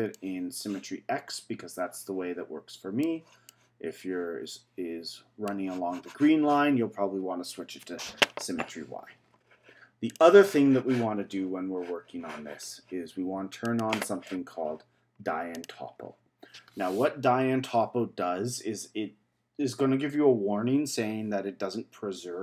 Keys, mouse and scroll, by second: 0.1-3.1 middle drag, 3.5-6.5 middle drag, 10.1 click, 13.6-18.5 drag.